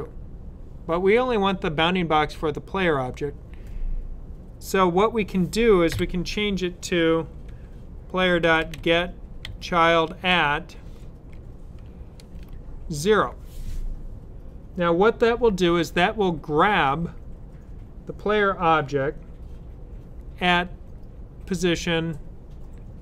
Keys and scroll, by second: 5.8 typing, 8.0-9.4 typing, 10.8 typing, 11.9-12.2 typing.